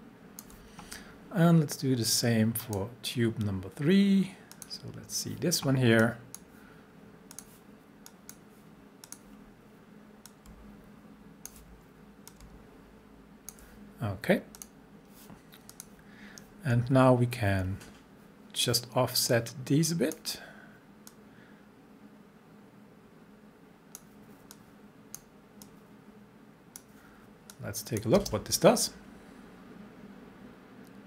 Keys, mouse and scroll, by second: 12.3-14.6 drag, 16.8-17.5 alt+scroll down 1, 19.3-20.2 drag, 28.2 space.